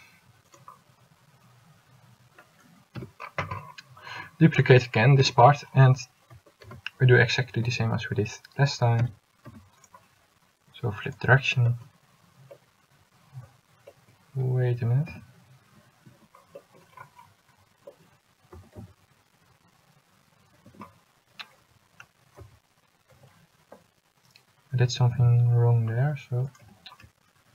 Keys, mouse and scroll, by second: 3.1 l, 5.4 l, 6.8 shift+d, 15.2 s, 18.6 s, 22.6 z, 25.3 z.